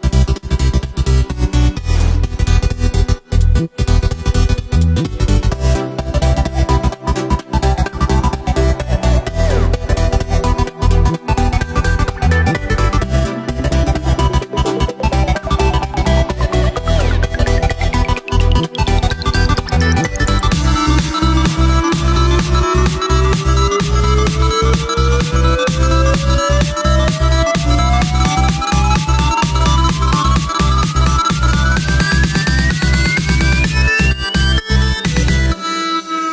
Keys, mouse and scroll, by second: 1.7 shift+d, 2.2 g, 5.2 shift+right click, 6.2 shift+right click, 7.2 alt+d, 8.5 ctrl+m, 10.6 g, 13.9-14.5 scroll down 1, 14.5 scroll down 1, 14.7 shift+right click, 15.2 shift+right click, 15.6 shift+right click, 16.8 ctrl+j, 17.6 scroll down 1, 17.7-18.0 scroll up 2, 18.0 scroll down 2, 18.2 right click, 18.5-20.6 middle drag, 20.6-21.3 scroll down 3, 21.3-21.7 middle drag, 21.7-22.6 scroll up 5, 22.6-23.7 middle drag, 23.7 scroll up 1, 23.8 middle click, 24.3 right click, 24.9 shift+right click, 25.7 shift+right click, 26.6 shift+right click, 27.4 shift+right click, 28.0 shift+right click, 28.4 s, 29.8-30.5 scroll down 2, 30.6-32.2 drag, 32.2 middle click, 32.5 s, 34.1 g.